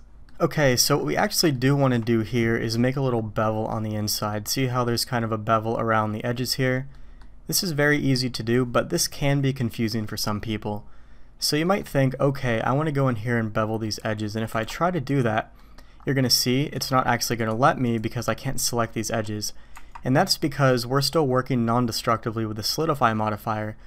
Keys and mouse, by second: 0.3-0.8 middle drag, 1.5-1.8 shift+middle drag, 2.8 middle click, 3.5 middle click, 4.3 middle click, 4.6 middle click, 6.9 middle drag, 7.9 middle click, 11.6 middle click, 13.8 click, 14.5 Tab, 15.6 click, 16.8-17.5 drag, 18.6 click, 19.7 Tab.